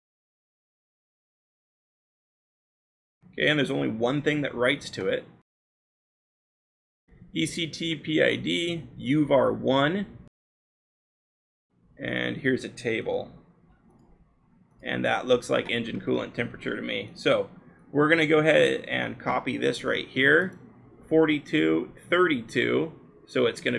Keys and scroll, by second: 0.6-1.1 scroll, 2.6-4.1 scroll, 6.9-7.9 scroll, 13.1 f, 15.8-16.5 scroll, 18.8 ctrl+c.